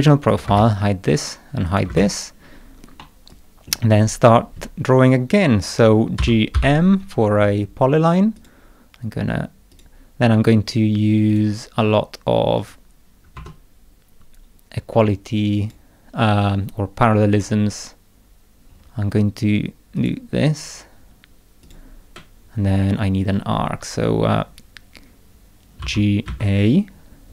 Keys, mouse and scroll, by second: 0.3 click, 0.4 space, 1.6 click, 1.9 space, 3.0 middle click, 3.3 click, 6.2 g, 6.5 m, 8.3 click, 9.7 click, 11.3 click, 12.6 click, 13.3 1, 15.6 click, 17.3 click, 18.7-19.2 scroll up 2, 19.9 click, 21.6 click, 22.6 scroll down 1, 22.8 middle click, 25.8 g, 26.2 a.